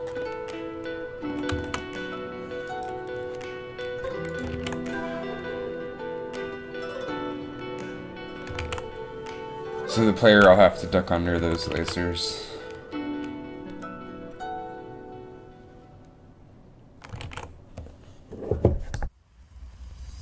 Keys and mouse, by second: 2.8-4.4 right drag, 4.6 alt+a, 8.8 alt+a, 11.5 shift+Left, 11.9 alt+a, 17.4 alt+a.